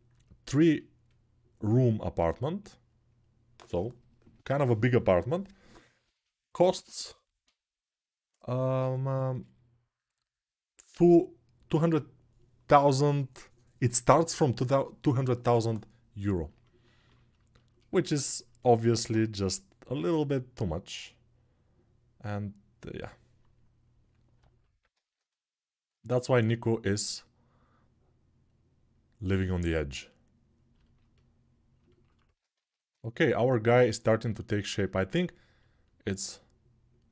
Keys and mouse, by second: 34.4-37.1 alt+shift+drag.